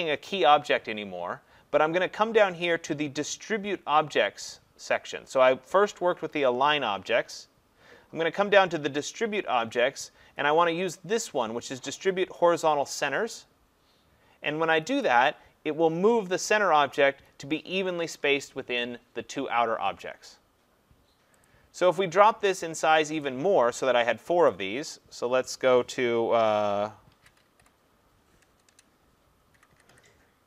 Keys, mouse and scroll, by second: 15.0 click, 21.5 click, 23.2 click, 24.5 click, 27.1-30.1 typing.